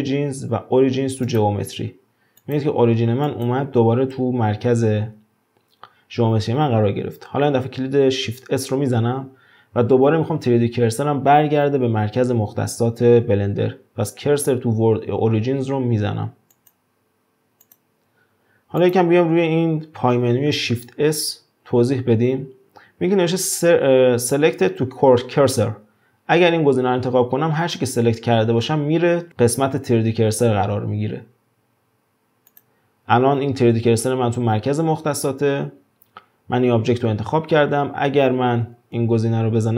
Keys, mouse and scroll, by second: 2.4 click, 3.2 click, 8.7 shift+s, 17.6 click, 18.8 drag, 19.2-21.6 scroll down 2, 21.6 shift+s, 38.3-38.9 scroll up 2, 38.9 shift+s.